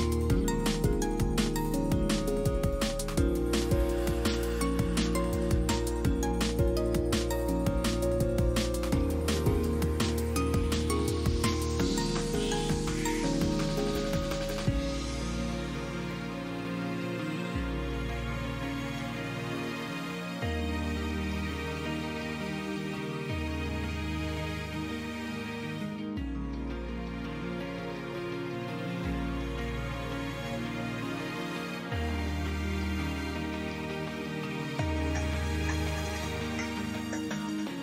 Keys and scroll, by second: 3.5 f, 4.6 s, 21.6 f, 26.5 i, 31.4 alt+x, 37.0 F3, 37.2 Delete.